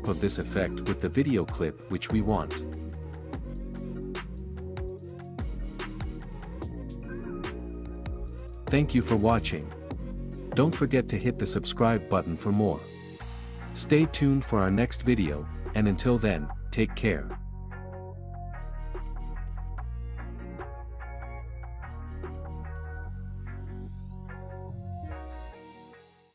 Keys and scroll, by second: 8.5 space, 10.4 space.